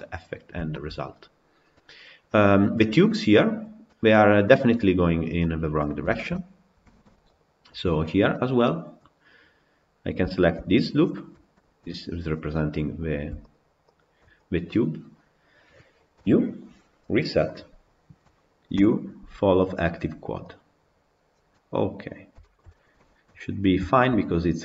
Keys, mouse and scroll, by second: 0.2-0.6 scroll up 2, 0.6-1.3 shift+middle drag, 1.3 scroll down 2, 1.6-5.1 middle drag, 5.1-5.7 scroll down 5, 5.2-5.6 middle drag, 5.9-7.2 shift+middle drag, 7.2 click, 7.7 Tab, 7.7 scroll up 3, 8.1 middle click, 8.5 scroll down 2, 11.6 KP_Decimal, 12.4-13.4 middle drag, 17.6 u, 20.6 u, 21.8-22.2 scroll down 6, 22.2-24.6 shift+middle drag.